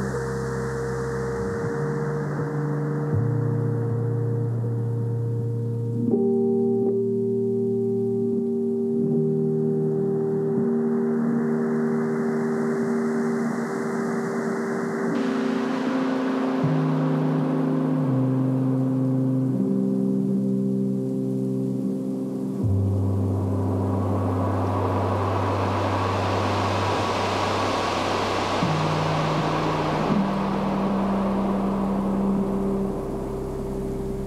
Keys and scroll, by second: 2.3-3.5 typing, 6.0-7.2 typing, 10.4 ], 11.3 [, 12.2 ], 13.1 [, 15.2 space, 17.4 [, 20.1-27.3 typing, 29.0-30.6 typing, 31.7 [, 32.3 [, 33.6 ].